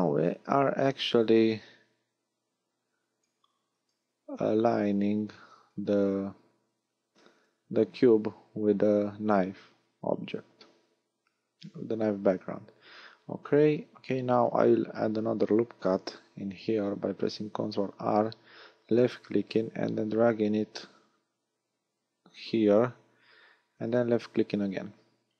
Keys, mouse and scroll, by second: 1.5 click, 3.6 a, 4.2 b, 5.6 click, 10.5 a, 15.1 ctrl+r, 23.9 click, 24.9 a.